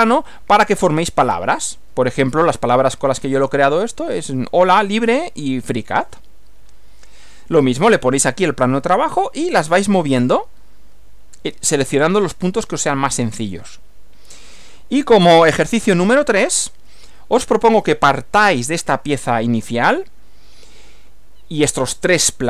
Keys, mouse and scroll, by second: 16.3 Right.